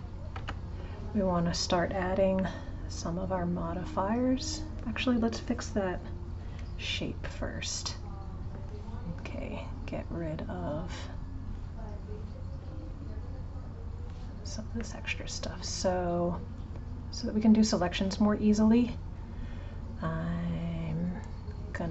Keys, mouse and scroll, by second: 0.3 Tab, 2.4-5.5 middle drag, 7.2-10.2 middle drag, 10.9 click, 14.7-17.8 middle drag, 20.8 click.